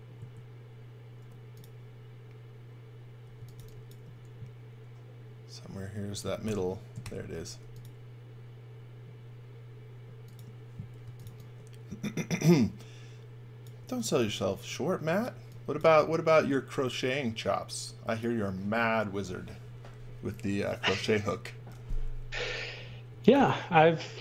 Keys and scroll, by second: 3.1-4.5 typing, 6.4 shift+5, 7.0 shift+5, 10.7-11.7 typing, 13.7 x, 14.2 v, 15.4 x, 15.7 v, 22.8-23.8 typing.